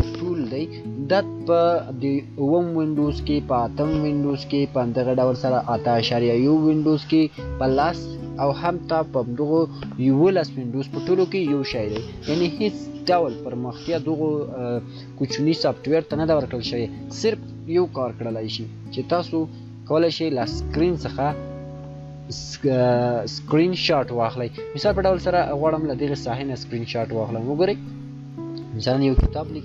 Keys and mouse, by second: 20.7 shift+click, 20.8 shift+click, 26.5-29.6 shift+drag.